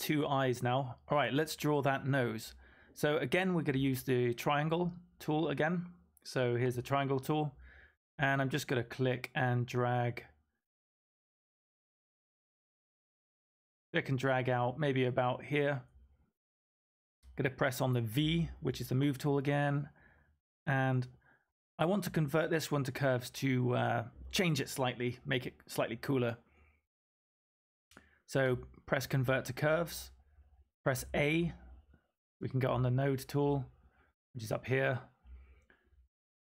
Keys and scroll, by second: 18.1 v, 30.9 a, 36.1-36.4 typing.